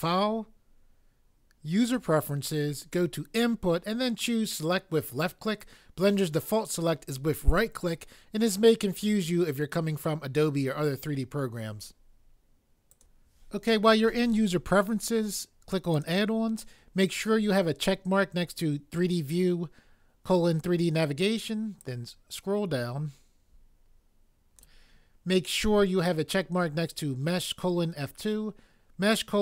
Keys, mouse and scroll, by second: 1.9 click, 12.9 click, 15.9 click.